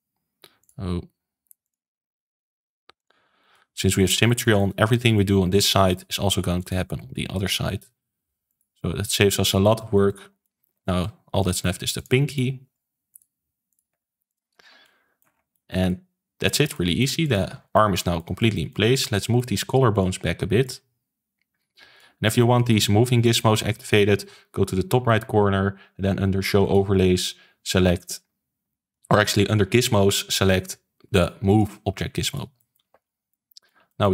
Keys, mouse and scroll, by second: 0.5 shift+click, 1.6 shift+click, 2.9 shift+click, 3.4-5.4 middle drag, 5.4 r, 6.0 g, 6.9 r, 7.5 g, 8.7-10.1 middle drag, 10.1 scroll up 3, 10.3 middle click, 11.3 click, 11.9 shift+click, 12.2 shift+click, 12.6 r, 13.2 g, 13.8 r, 14.5 scroll down 2, 14.8 middle click, 15.2 scroll down 4, 15.4-17.1 shift+middle drag, 17.1 click, 17.4 ctrl+s, 17.7-19.9 middle drag, 19.9 click, 20.6 click, 22.2 shift+middle click, 22.9 scroll up 2, 23.1-32.9 shift+middle drag, 32.9 ctrl+s, 33.0 scroll down 2, 33.2-34.1 middle drag.